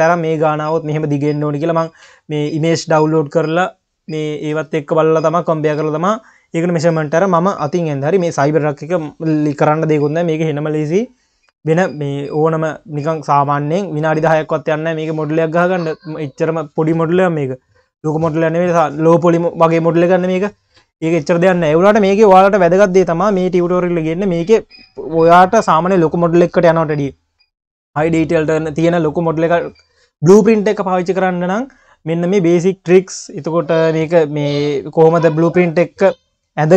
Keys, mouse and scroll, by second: 7.6-10.7 scroll up 2.